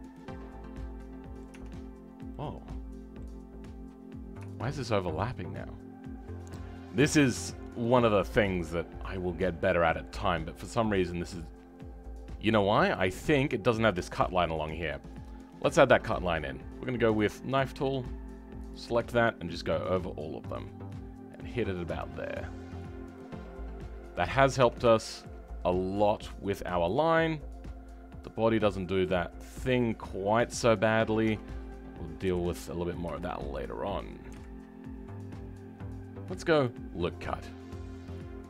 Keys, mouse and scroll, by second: 0.1-1.5 middle drag, 1.5 Tab, 2.5-4.0 middle drag, 4.0-4.5 scroll up 2, 4.5-8.1 shift+middle drag, 10.2 right click, 10.2 shift+middle click, 11.2-11.7 scroll down 4, 11.7-14.1 right drag, 11.7 middle click, 14.1 KP_3, 17.1-22.2 drag, 22.2-23.1 scroll down 2, 23.1-24.4 middle drag, 24.4 scroll up 5, 24.5 Tab, 24.9-26.1 shift+middle drag, 26.6-29.7 middle drag, 30.5 scroll down 1, 30.6 middle click, 31.2 Tab, 32.2 KP_7, 33.2-34.3 right drag, 33.2 shift+middle click, 34.3 w, 34.6 scroll down 4, 36.6-38.4 drag.